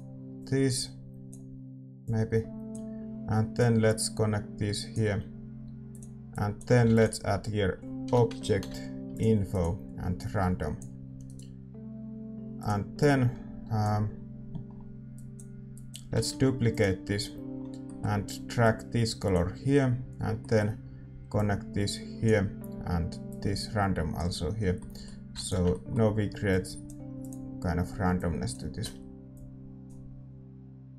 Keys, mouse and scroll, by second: 11.7-19.3 right drag, 19.3 middle click, 19.3 shift+d, 20.4-22.2 middle drag, 22.2-30.9 drag, 24.5-28.7 middle drag, 26.5 ctrl+s.